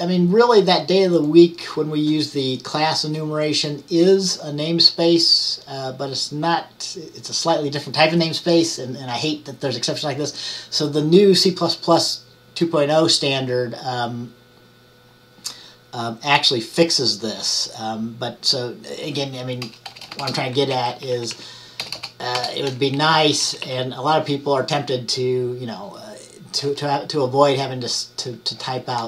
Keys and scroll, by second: 20.0 ▯, 20.8 Down, 21.0 Right, 21.2 Right, 21.4 Right, 23.1 Down, 23.3 Right, 23.6 Right, 23.7 Right.